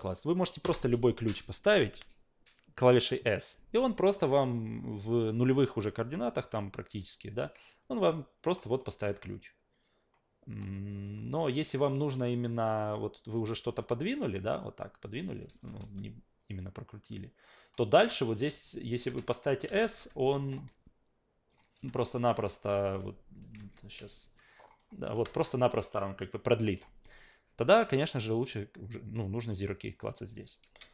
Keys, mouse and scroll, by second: 0.6 s, 8.6 click, 11.9-12.8 drag, 13.7 w, 14.1 click, 15.5 ctrl+z, 15.8 e, 16.4 click, 17.7-18.3 drag, 19.1 a, 19.7 s, 20.0 a, 20.5 alt+middle click, 21.5 click, 21.8 a, 22.3 alt+right click, 22.7 ctrl+z, 23.6 ctrl+z, 24.0 ctrl+z, 24.6 click, 24.9 alt+middle click, 25.1 s, 28.3 click, 30.1 ctrl+z, 30.4 ctrl+z, 30.8 ctrl+z.